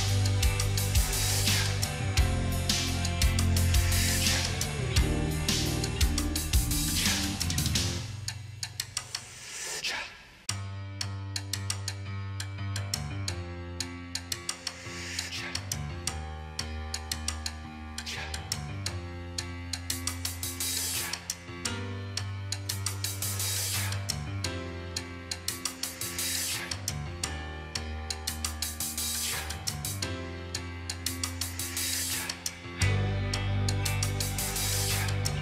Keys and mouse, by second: 2.5 right click, 23.1 ctrl+t, 24.1 shift+click, 32.1 8, 32.8 Return, 34.9 ctrl+a.